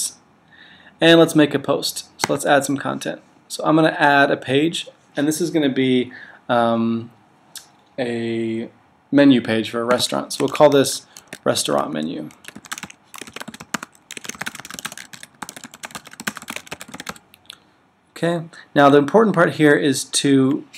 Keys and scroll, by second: 13.9-17.3 typing.